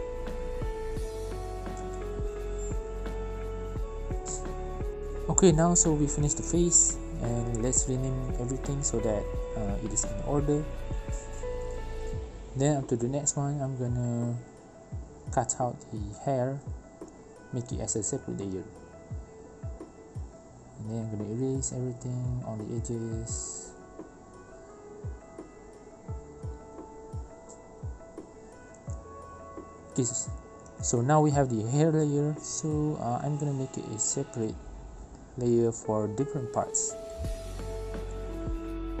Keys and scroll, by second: 4.8 ctrl+z, 6.1 ctrl+z, 8.5 ctrl+z, 10.8 ctrl+shift+z, 17.0 ctrl+j, 17.8 ctrl+alt+e, 23.8 ctrl+z, 24.0 ctrl+z, 26.2 ctrl+z, 29.0-30.0 typing, 30.4 Return, 30.5 ctrl+j, 31.1 1, 31.3 Return, 32.3 e, 34.0 ctrl+z, 34.6 Delete, 34.7 ctrl+j, 35.1 1, 35.5 Return.